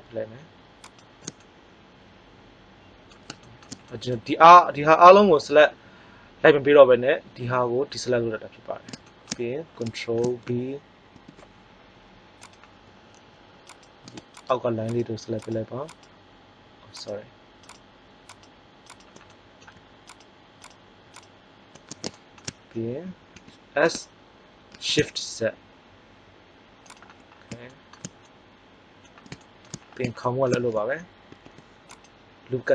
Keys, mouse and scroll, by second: 1.6-3.2 middle drag, 9.0 middle click, 11.1 ctrl+b, 12.5-13.7 drag, 13.7 right click, 23.3 s, 26.9 click, 31.2 ctrl+r.